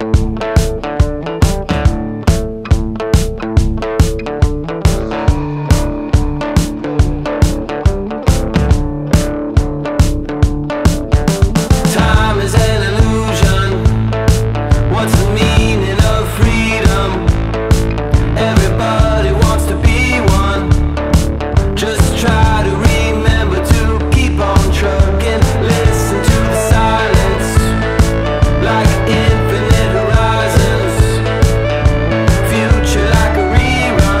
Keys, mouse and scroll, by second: 1.8-5.0 drag, 5.0 ctrl+z, 6.1-8.1 drag, 12.2-19.6 drag, 19.6-21.2 drag, 21.2 ctrl+z, 23.5-34.2 drag.